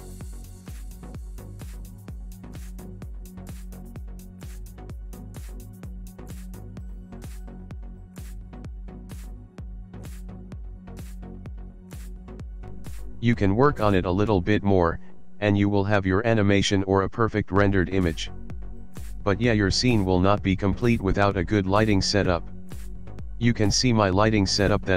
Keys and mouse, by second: 3.2 click, 6.7 click, 8.2 click, 9.9 middle click, 11.0 shift+middle click, 11.7 middle click, 12.3 shift+middle click, 16.3-18.0 ctrl+middle drag.